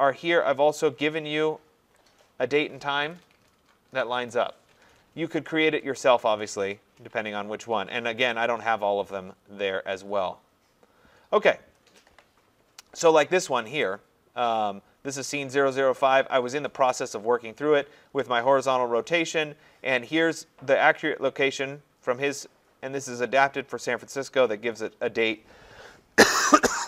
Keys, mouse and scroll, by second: 3.1 click, 6.0 click, 7.6-8.7 scroll, 9.4-10.5 scroll, 11.6 scroll, 11.8 scroll down 11, 12.3 scroll up 2, 13.0 scroll up 3, 15.5 scroll, 15.6 scroll down 10, 18.7 scroll.